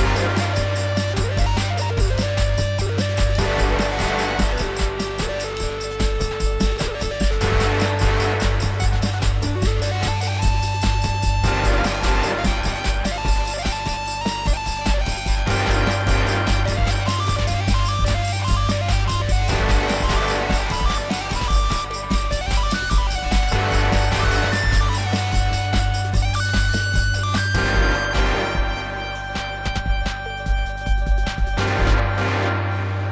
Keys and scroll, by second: 1.2 F4, 6.9 alt+w, 29.1 ctrl+z, 30.6 alt+w, 31.7 F4.